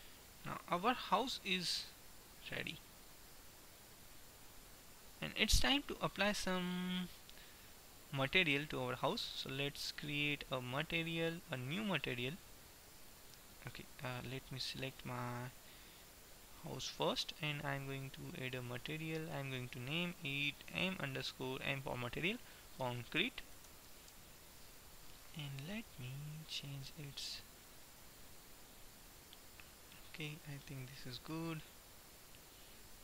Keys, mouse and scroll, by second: 1.1 Tab, 1.9 Tab, 2.9 a, 4.2-5.2 middle drag, 8.7-13.9 drag, 13.2 middle click, 14.1-15.1 right drag, 19.2-21.1 drag, 27.1-28.9 drag, 31.2-33.0 middle drag.